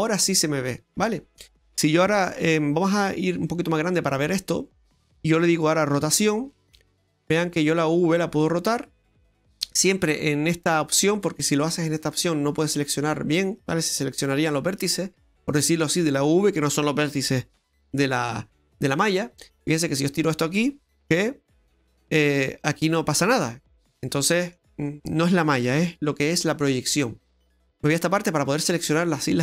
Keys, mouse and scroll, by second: 2.8-3.4 scroll up 5, 3.4 middle click, 4.1-4.5 scroll down 1, 6.0 r, 12.0 click, 12.9 right click, 13.5 right click, 14.2 right click, 14.7 right click, 20.0 right click, 21.1 g, 23.3 middle click, 25.7 ctrl+z, 27.7 click, 28.4 right click.